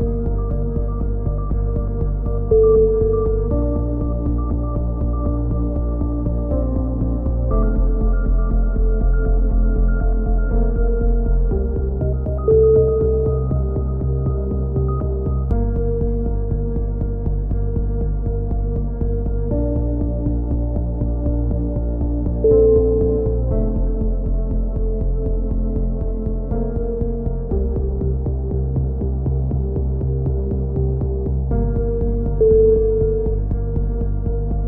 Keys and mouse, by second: 1.4-2.4 middle drag, 2.4 click, 3.5 click, 4.6 a, 4.8-7.3 drag, 5.0 z, 5.8 z, 7.3-11.3 middle drag, 11.4-12.5 right drag, 12.5 v, 13.0 ctrl+z, 13.8 right click, 14.7 right click, 15.0 x, 15.9 middle click, 16.5 click, 17.4 click, 17.6 right click, 17.6 e, 18.3 click, 19.8 right click, 20.7 f, 21.0-22.5 right drag, 22.4 f, 22.8 right click, 23.7 click, 25.1 click, 25.1-27.3 typing, 28.5 click, 29.4 middle click, 30.0 middle click, 31.6-32.6 right drag, 32.8 click, 34.1-34.6 right drag, 34.1 a, 34.2-34.6 middle drag.